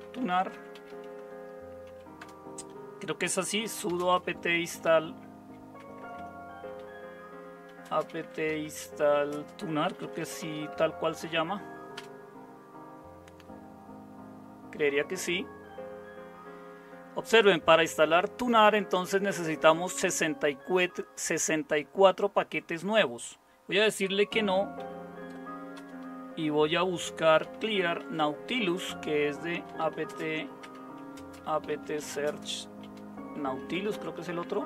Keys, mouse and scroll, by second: 0.0-2.2 typing, 3.2-11.9 typing, 24.7 typing, 25.7 Return, 27.2-34.6 typing.